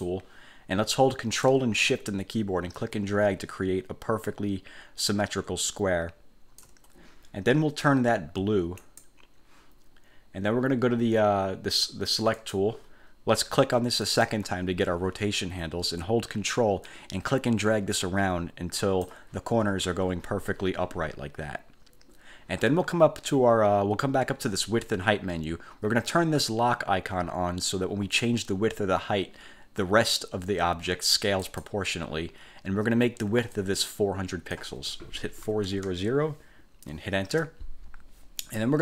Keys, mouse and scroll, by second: 0.0 click, 2.9-6.9 ctrl+shift+drag, 8.9 click, 12.5 click, 14.2 click, 17.0-19.4 ctrl+drag, 31.6 click, 33.6-34.8 drag, 35.3-36.3 typing, 37.4 Return.